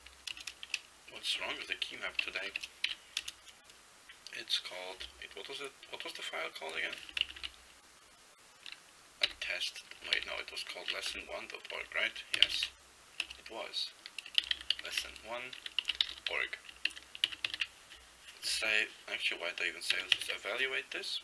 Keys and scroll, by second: 1.6 ~, 2.4 /, 2.9 ., 7.3 ctrl+x, 7.5 ctrl+b, 9.4 ctrl+g, 10.0 ctrl+x, 10.2 ctrl+b, 11.2 Return, 12.4 ctrl+x, 12.5 ctrl+b, 13.3 Return, 14.2-16.8 typing, 16.9 ctrl+e, 17.3 ctrl+x, 17.5 ctrl+e, 20.0 ctrl+x, 20.2 ctrl+e.